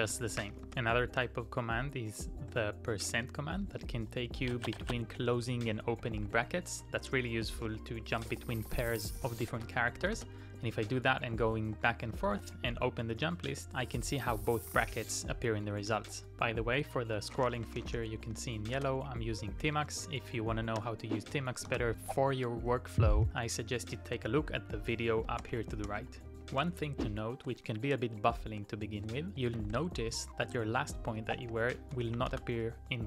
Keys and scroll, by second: 0.0-0.7 typing, 2.5 shift+4, 3.7 shift+5, 5.2 shift+5, 5.7 shift+5, 7.7-11.4 typing, 17.5-19.5 typing, 20.5-21.7 typing, 24.2 shift+5, 25.4 ctrl+o, 25.9 ctrl+o, 26.2-28.0 typing, 30.9-31.9 typing, 32.1 Up, 32.3 Return.